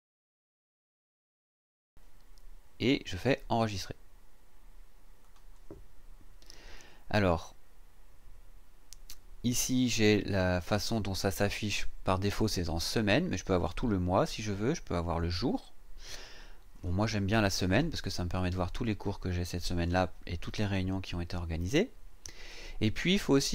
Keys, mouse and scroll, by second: 5.2 click, 13.6 click, 15.2 click, 16.7 click.